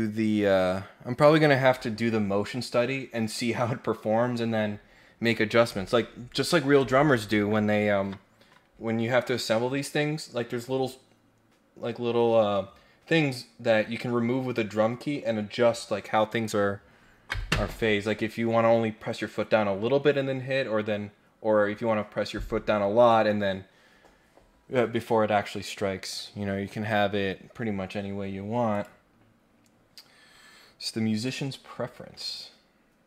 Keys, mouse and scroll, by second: 28.7 click, 29.1 scroll down 2, 29.4 scroll up 1, 31.2 click, 31.6 scroll down 1, 32.0 scroll up 1, 32.4 scroll down 1.